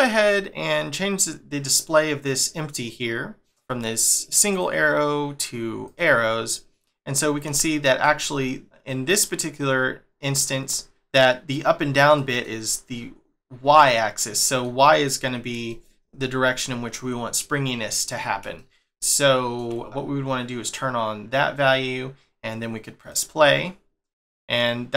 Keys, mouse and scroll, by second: 4.5 click, 6.5 middle click, 8.6 middle click, 12.1 middle click, 13.8 middle click, 15.7 shift+middle click, 18.6 shift+middle click, 20.6 click, 23.0 click, 23.5 scroll down 1, 24.2 middle click.